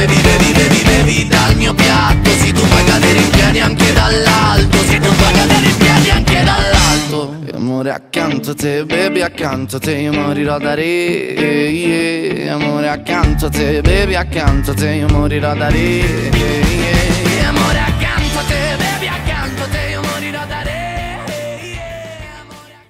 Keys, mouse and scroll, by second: 1.3 a, 1.5 g, 3.3 right click, 3.6-5.0 middle drag, 5.0 Tab, 5.2-6.6 middle drag, 7.7 Tab, 7.9 a, 8.7 click, 9.7 click, 10.2 click, 10.9 g, 11.8 right click, 12.1 Tab, 12.4-16.0 middle drag, 16.0 w, 18.8-20.0 drag, 20.0-22.4 middle drag.